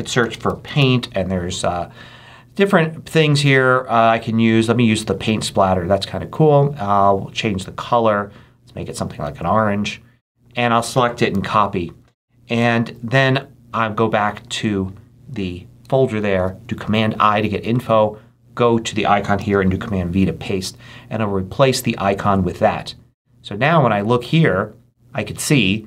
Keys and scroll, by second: 0.0-1.2 typing, 11.2 super+c, 12.7 super+h, 16.2 super+i, 19.3 super+v.